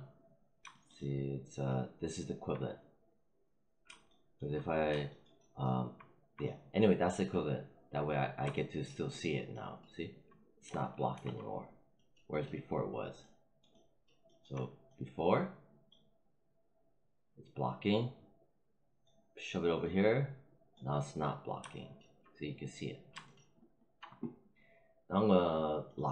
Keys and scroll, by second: 11.0 alt+5.